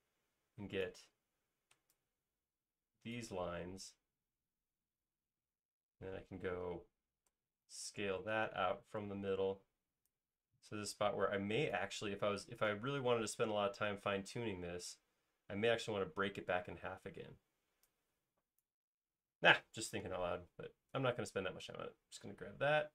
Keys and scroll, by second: 7.7 s, 13.5 space.